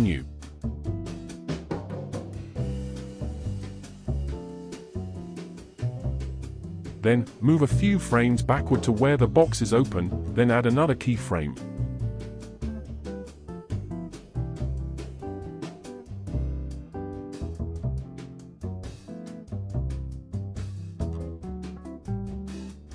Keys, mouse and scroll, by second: 0.4-3.6 right drag, 4.8-8.0 drag, 8.0-8.7 scroll down 3, 8.7-10.2 shift+middle drag, 10.2 g, 17.4-20.2 right drag, 20.2-21.4 drag, 21.4 space.